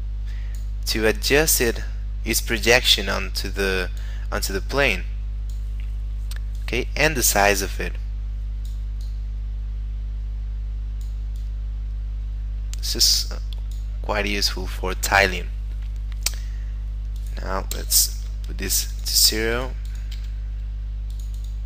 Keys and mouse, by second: 1.4 click, 4.5 click, 9.0 click, 11.4 click, 17.1 click, 18.1 0, 18.7 click, 19.2 0, 19.5 click, 20.1 0, 21.1 click.